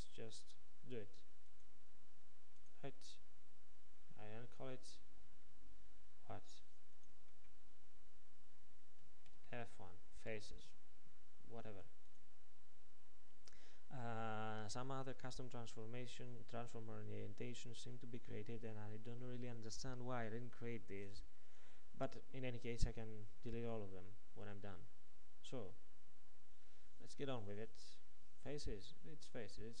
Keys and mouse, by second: 7.0-10.3 middle drag, 12.1-29.8 middle drag.